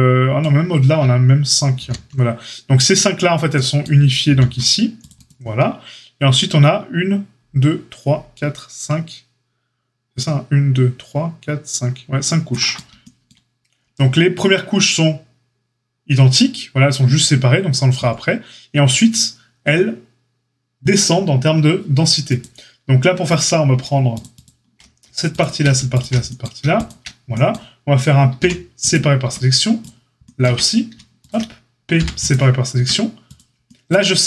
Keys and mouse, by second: 4.2 ctrl+r, 22.2-23.3 drag, 24.1 alt+shift+click, 24.1 alt+shift+middle click, 24.3 alt+shift+click, 24.4 alt+shift+middle click, 25.3 alt+shift+click, 25.3 alt+shift+middle click, 25.9 alt+shift+click, 25.9-29.7 alt+shift+middle drag, 28.3 p, 29.2 Tab, 29.7 click, 30.4 Tab, 30.4-34.2 middle drag, 31.9 p, 32.7 Tab, 33.3 click.